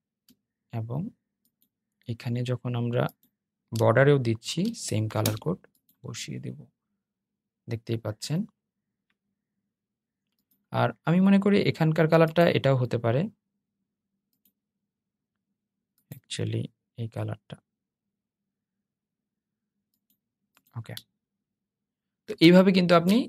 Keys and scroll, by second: 3.5 super+v.